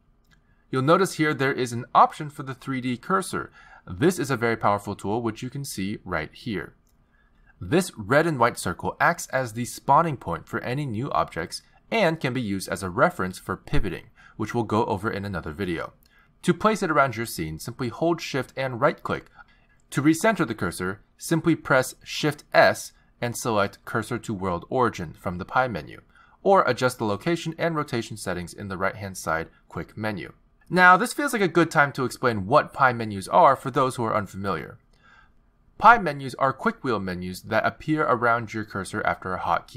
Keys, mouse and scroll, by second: 0.6-1.9 scroll down 2, 1.9-2.8 scroll down 1, 5.0 click, 10.2 click, 12.3 shift+a, 16.4 x, 19.3 shift+right click, 20.8 shift+right click, 22.9 shift+s, 23.6 shift+s, 28.9 click, 30.0 click, 35.8 n, 38.8 t.